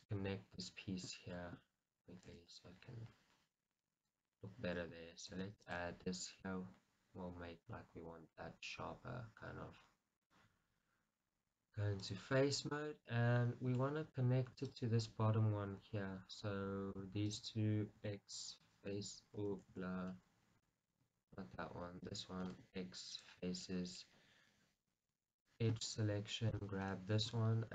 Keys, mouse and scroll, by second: 0.0-2.8 middle drag, 0.4-1.1 scroll up 2, 1.1 scroll up 1, 2.4 shift+z, 2.6 scroll down 2, 3.5-10.7 middle drag, 3.5-4.6 scroll up 2, 4.6-5.4 scroll up 1, 5.4 ctrl+r, 12.9-14.9 middle drag, 14.9 click, 15.2-17.4 middle drag, 17.4 shift+click, 18.1 x, 20.0 ctrl+z, 20.3-21.5 middle drag, 21.5 shift+click, 22.8 x, 23.8-25.7 middle drag, 25.7 click, 27.1 middle click.